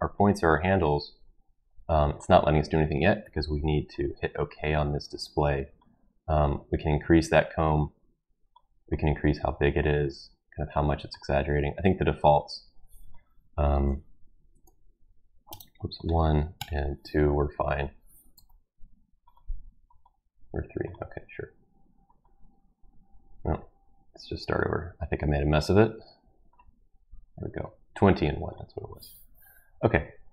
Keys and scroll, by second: 13.7 ctrl+a, 14.1-16.5 typing, 18.3 typing.